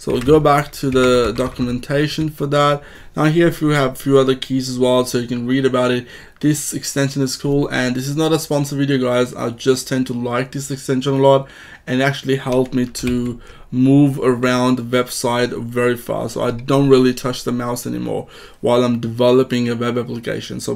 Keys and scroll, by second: 0.1 ctrl+Tab, 13.0 alt+Left.